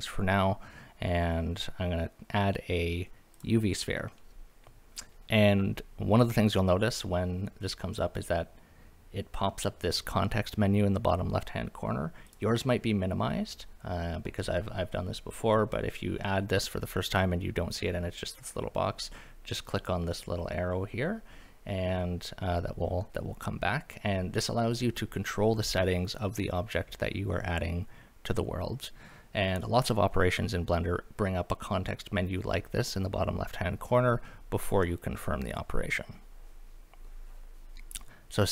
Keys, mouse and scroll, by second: 12.3 click, 19.8 click.